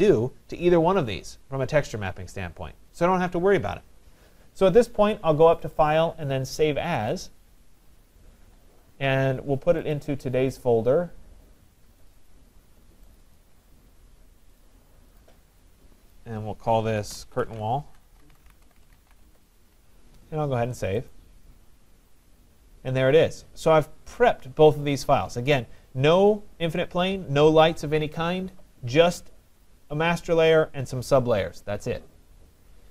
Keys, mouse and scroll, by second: 0.6 right click, 4.3 middle click, 4.3 middle click, 4.5 middle click, 5.8 click, 7.1 click, 10.0 click, 12.1 click, 12.3 click, 13.2 click, 13.4 click, 14.6 click, 15.2 click, 16.1 click, 17.1-19.5 typing, 21.1 click, 22.7 middle click, 22.7 middle click, 22.8 middle click.